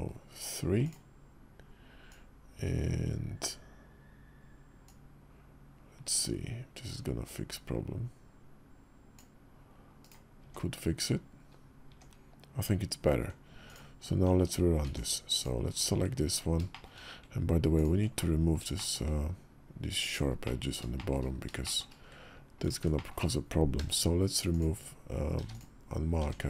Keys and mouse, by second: 10.1 Tab, 11.6 Tab, 14.6 Tab, 15.1 click, 16.5 shift+click, 17.6 ctrl+click, 17.9 middle click, 18.5 shift+click, 19.6 ctrl+click, 20.2 middle click, 20.7 shift+click, 21.4 shift+click, 22.4 ctrl+click, 22.7 shift+click, 23.5 q, 25.1 q, 26.0 Tab.